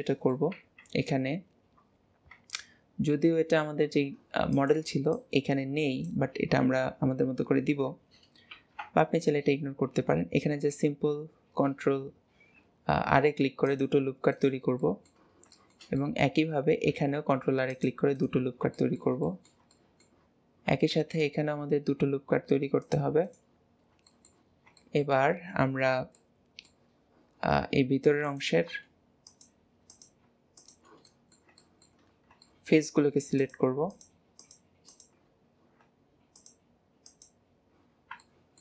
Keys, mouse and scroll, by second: 0.5 Tab, 8.5 ctrl+r, 14.8-16.4 middle drag, 16.4-16.9 scroll up 1, 16.9 ctrl+r, 18.7-20.3 shift+middle drag, 20.3-20.9 scroll up 1, 20.9 ctrl+r, 23.7 scroll down 1, 23.7-24.1 scroll up 1, 24.1 shift+middle click, 24.5 scroll down 2, 24.7-28.2 shift+middle drag, 28.2 click, 29.2 click, 29.9 click, 30.5 shift+click, 31.0-32.0 middle drag, 32.0 scroll up 2, 32.4 shift+middle click, 33.3 shift+click, 33.9 shift+click, 34.3 shift+click, 34.9 shift+click, 35.4-36.3 scroll up 1, 36.3 shift+click, 37.1 shift+click, 37.9-38.3 scroll down 3, 38.3-38.6 shift+middle drag.